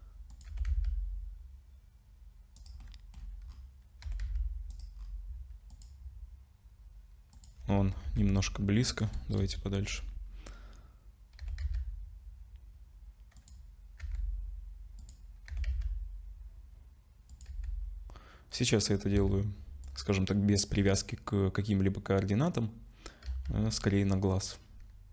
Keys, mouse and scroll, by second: 0.5 r, 2.8 middle click, 3.1-4.0 scroll down 10, 4.0 r, 4.9-5.7 scroll down 3, 5.7 click, 5.7 scroll down 1, 7.3 click, 7.8 g, 9.4 KP_0, 10.3 scroll up 2, 11.4 r, 14.0 g, 15.5 r, 17.5 g, 19.1 s, 23.2 z.